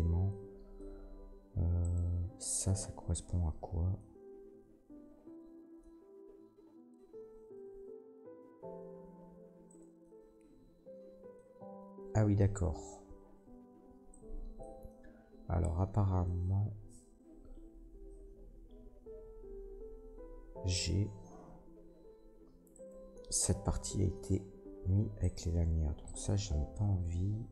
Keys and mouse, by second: 1.8 middle click, 1.9-11.2 drag, 5.1 l, 8.6 g, 14.4-25.2 drag, 21.4 g, 25.2 middle click, 25.3 click, 26.0 middle click, 26.1-27.5 drag, 26.4 l.